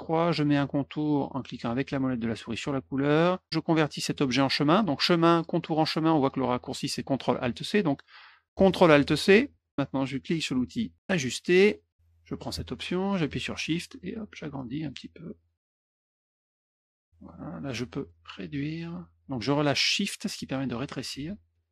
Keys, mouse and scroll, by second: 2.4 middle click, 4.8 click, 9.5 ctrl+alt+c, 11.0 click, 14.0 shift+click, 14.7 shift+click, 15.4 shift+click, 15.8 shift+click, 16.2 shift+click, 16.6 shift+click, 18.0 click, 18.4 click, 20.7 click, 21.2 shift+click.